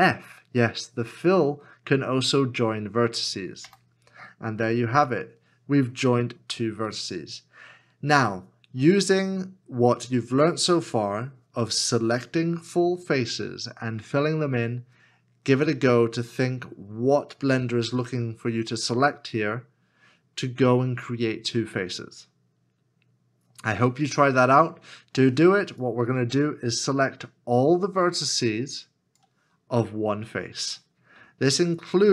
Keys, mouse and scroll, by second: 3.6 f, 31.3 alt+w.